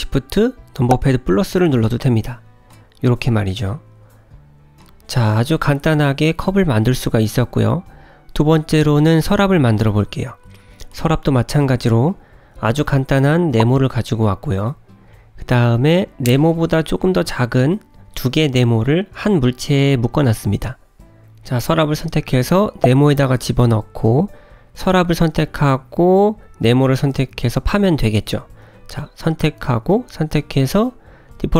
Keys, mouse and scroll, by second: 2.6 Tab, 3.4 click, 3.9 middle click, 6.1 Tab, 6.5-7.3 scroll down 3, 7.4 shift+middle click, 8.3 scroll up 1, 8.5 scroll down 1, 8.7 middle click, 9.8 shift+middle click, 11.6 click, 12.4 click, 12.7 g, 17.0 click, 18.0 Tab, 18.4 middle click, 21.4 Tab, 22.7 g, 26.3 middle click, 28.1 scroll up 1, 29.6 click, 30.4 shift+click.